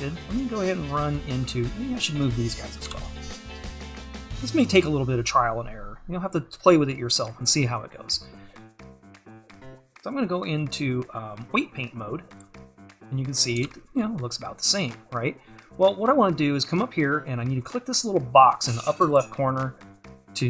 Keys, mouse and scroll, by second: 1.5-2.9 scroll up 1, 4.8 c, 5.2-6.9 scroll down 1, 12.5 click, 13.3 scroll down 1, 19.1-20.4 drag.